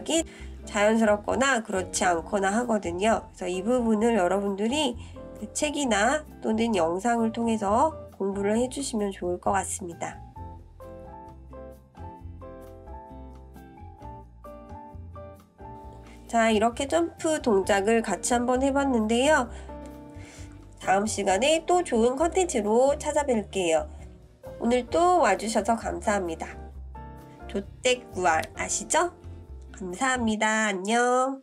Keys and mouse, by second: 2.1 ctrl+KP_3, 5.7-14.7 drag, 15.9-19.9 drag, 20.5-21.0 drag, 21.9-23.4 drag, 24.6-29.4 drag, 30.2-31.1 shift+middle drag.